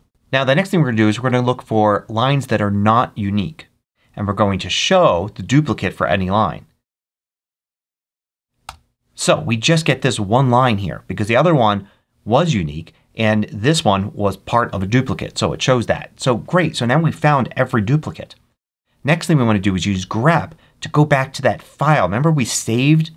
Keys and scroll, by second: 7.0 Up, 8.5 Return.